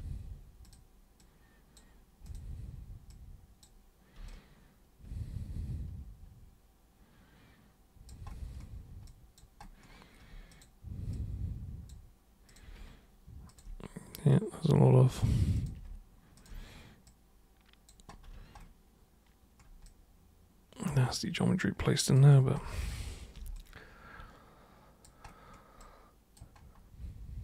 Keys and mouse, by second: 0.6 super+click, 1.1 super+click, 2.2 super+click, 3.1 super+click, 4.2-8.1 alt+super+drag, 9.0 alt+super+click, 10.5 super+click, 11.1 super+click, 12.5 super+click, 13.5 ctrl+shift+super+click, 14.1 super+click, 15.5 super+click, 16.4 ctrl+shift+super+drag, 17.0 super+click, 19.8-22.1 alt+super+drag, 23.5-25.0 alt+super+drag, 25.8 alt+super+click.